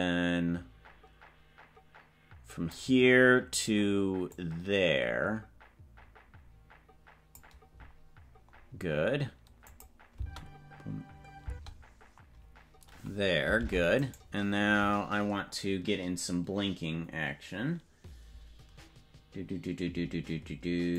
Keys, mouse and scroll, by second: 3.2 scroll down 3, 4.3-7.5 drag, 8.4 scroll up 3, 9.8 click, 10.2 space, 13.7 ctrl+Tab, 14.2 right click.